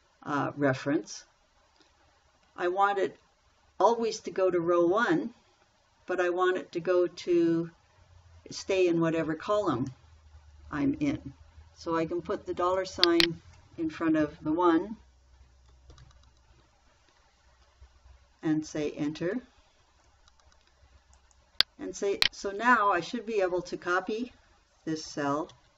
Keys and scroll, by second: 16.3 shift+4, 19.6 Return.